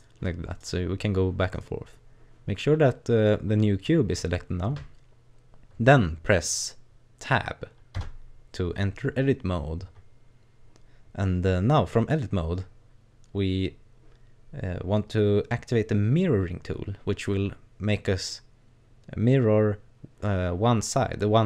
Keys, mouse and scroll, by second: 0.5 right click, 1.6 right click, 3.4-4.5 scroll up 1, 7.9 Tab.